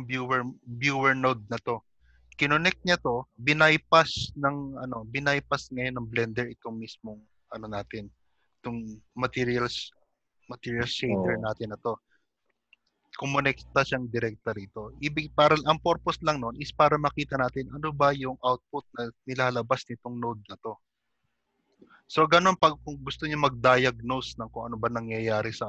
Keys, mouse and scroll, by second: 2.9 click, 5.7 middle click, 7.8 click, 12.4 middle click, 13.7 click, 15.9 middle click, 18.2 middle click.